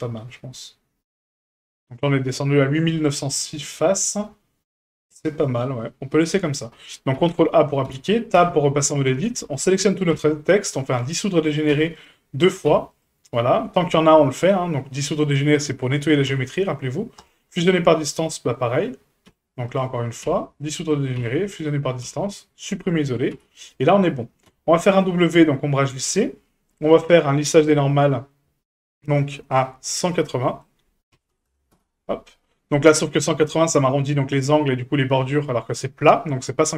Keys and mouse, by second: 4.1-5.8 middle drag, 7.3 ctrl+a, 7.9 Tab, 8.3 a, 9.1 a, 10.1 q, 11.7 q, 16.3 q, 19.2 q, 21.2 q, 22.0 q, 23.3 Tab, 23.7-24.0 middle drag, 24.4 w, 26.4 shift+middle drag, 27.5-29.0 drag, 29.5 drag, 30.0 click, 30.5-32.8 drag, 33.2 middle click.